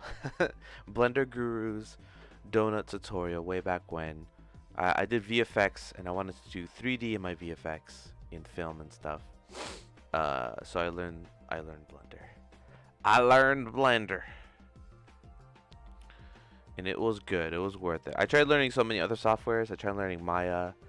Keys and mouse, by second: 3.1-16.3 drag, 17.2 click, 18.3 shift+middle click.